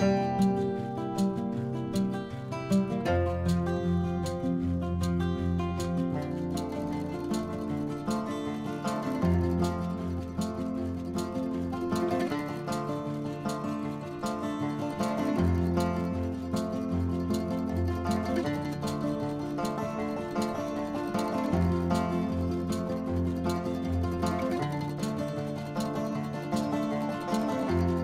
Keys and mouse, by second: 0.4 click, 0.6 click, 0.7 click, 1.1-1.9 typing, 2.8 Return, 2.8 click, 4.3 click, 5.3 click, 5.7 shift+c, 5.9 a, 6.0 p, 6.2 s, 6.5 Return, 8.5 middle click, 9.3 click, 10.1 middle click, 11.1 click, 12.8 click, 15.7 click, 16.9 Tab, 17.2 click, 17.4 Tab, 20.2 click, 20.7 click, 22.0 click, 24.1 click, 25.1 click.